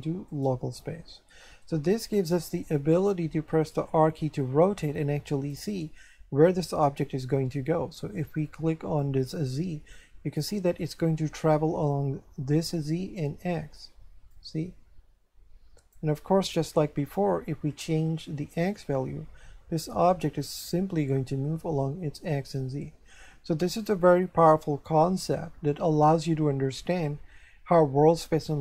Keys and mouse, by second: 0.3 click, 2.2 right click, 3.7 r, 5.5 right click, 9.0 click, 14.3 click, 18.2 click.